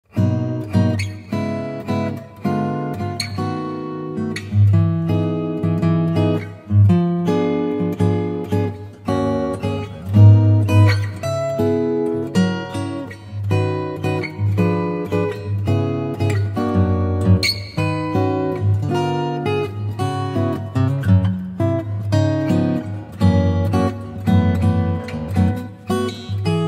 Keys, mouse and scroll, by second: 1.7 click, 5.6 click, 8.6 click, 10.8 click, 13.8 click, 22.1 click, 26.2 click, 26.3 click.